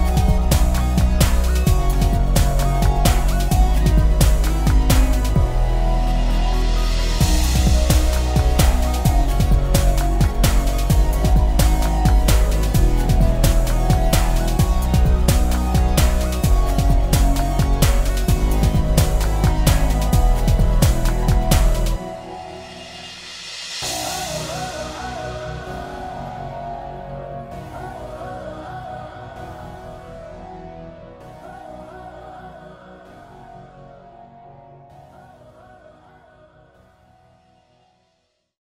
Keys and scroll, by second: 14.6 ctrl+space, 15.4 ctrl+space, 15.9 ctrl+space, 20.8 f, 24.6 ctrl+space, 25.6 ctrl+space.